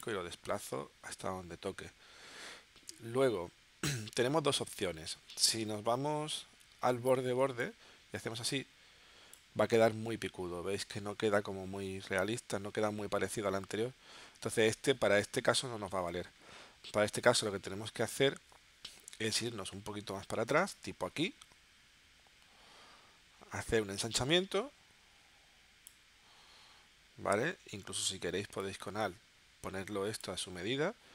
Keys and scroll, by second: 16.0 super+z, 18.5 space.